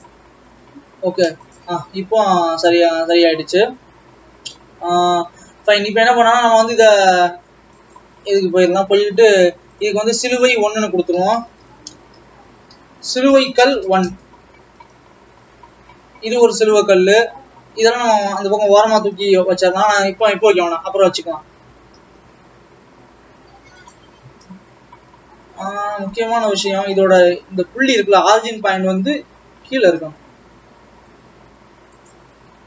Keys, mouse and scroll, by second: 0.2 u, 1.5 click, 1.9 alt+a, 4.6-8.0 middle drag, 8.0 click, 10.4-14.1 drag, 15.4 scroll down 3, 16.0-17.5 scroll down 1, 17.5-18.5 scroll down 9, 18.5-19.7 scroll up 11, 21.7 g, 24.2-24.8 scroll up 3, 24.8-26.3 scroll down 1, 26.6 ctrl+z, 28.3 Tab, 28.8 a, 29.7 g, 32.5 Tab.